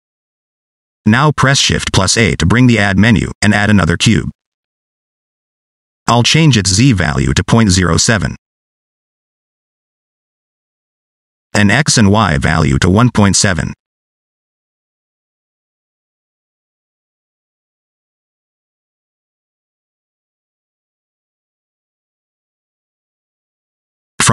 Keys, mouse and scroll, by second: 0.0 middle click, 0.4-0.7 scroll up 3, 0.7 middle click, 1.2 shift+middle click, 1.7 scroll down 1, 2.1 shift+middle click, 4.2 shift+a, 5.5 scroll up 1, 5.7 middle click, 6.7 click, 8.7 middle click, 9.9 click, 10.4 scroll up 1, 10.6 shift+middle click, 11.6 click, 14.7-15.9 scroll up 2, 15.9 click, 21.7 scroll down 2, 22.0 middle click, 24.0 click.